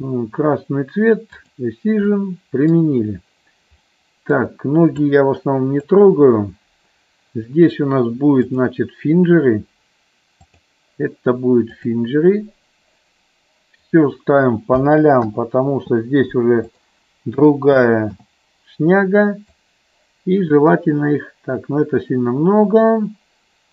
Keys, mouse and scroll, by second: 1.3 click, 2.1 middle click, 3.8 middle click, 5.0 click, 8.5-10.7 drag, 11.8 click, 13.8-15.6 drag, 16.7-18.6 drag, 19.4-23.7 drag.